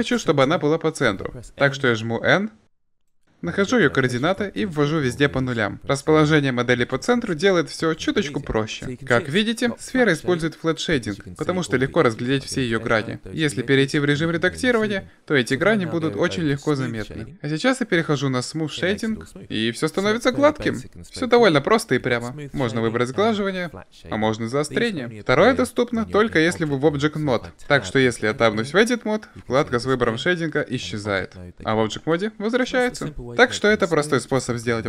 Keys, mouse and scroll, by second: 1.2 n, 7.8 middle click, 8.8-9.4 middle drag, 12.6 Tab, 13.8 Tab, 17.5 click, 23.6-24.9 drag, 25.3 Tab, 30.4 Tab.